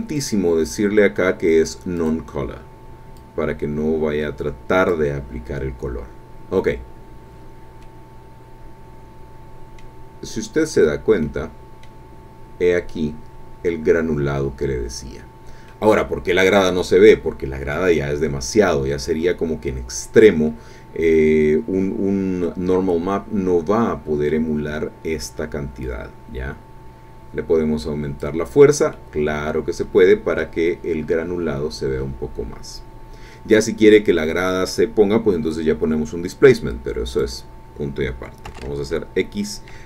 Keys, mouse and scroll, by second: 0.2 click, 2.0 click, 3.2-5.1 drag, 7.8-10.0 drag, 10.3-11.0 scroll up 1, 11.2 click, 12.2-12.6 scroll up 1, 14.9-15.7 scroll down 3, 15.7-17.9 drag, 18.1-18.7 scroll up 2, 20.0-20.4 scroll down 2, 20.8-21.2 scroll down 2, 21.7-22.4 scroll down 2, 22.4-24.5 drag, 25.8-28.4 drag, 28.9-30.6 middle drag, 30.6-31.1 scroll up 1, 32.0-32.6 scroll down 2, 37.1 click, 38.5 x.